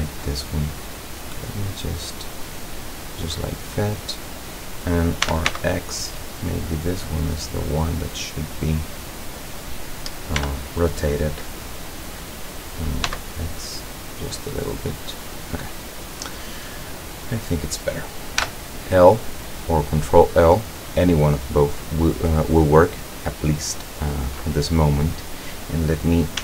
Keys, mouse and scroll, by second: 0.1-3.0 drag, 5.3 r, 5.5 x, 7.4 click, 8.0-9.6 drag, 10.4 r, 13.1 x, 15.2 click, 15.7-16.6 middle drag, 17.1 right click, 18.4 l.